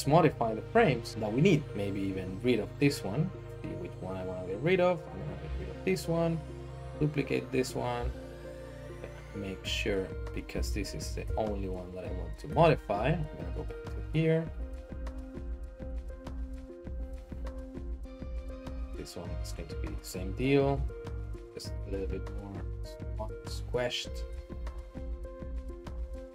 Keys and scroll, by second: 5.4 x, 6.8 shift+d, 8.0 typing, 8.9 Escape, 10.5 typing, 11.2 Escape, 12.5 Tab, 14.4 typing, 15.7-16.9 typing, 19.5-24.1 typing.